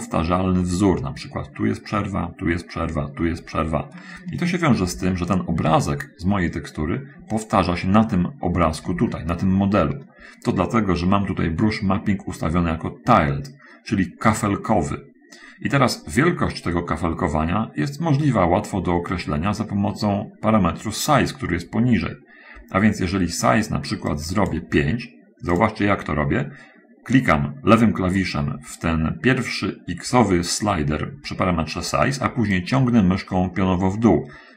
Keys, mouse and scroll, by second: 0.5 scroll up 2, 5.1 ctrl+z, 5.9 ctrl+z, 9.4 shift+click, 19.8-20.2 scroll down 2, 24.4 click, 25.9 click, 32.6-34.5 drag.